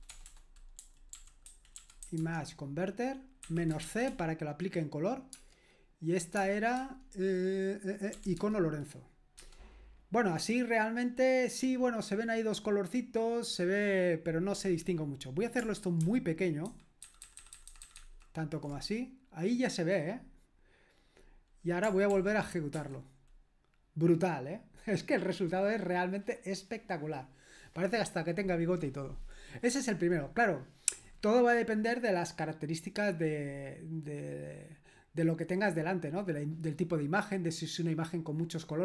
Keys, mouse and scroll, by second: 0.0-2.5 typing, 3.6-4.3 typing, 6.3 Tab, 6.7 Tab, 8.4 Tab, 9.4 Return, 16.7 ctrl+alt+-, 17.0 ctrl+alt+-, 17.3 ctrl+alt+-, 17.4 ctrl+alt+-, 17.6 ctrl+alt+-, 17.8 ctrl+alt+-, 17.9 ctrl+alt+-, 18.1 ctrl+alt+-, 22.1 ctrl+p, 22.8 Return.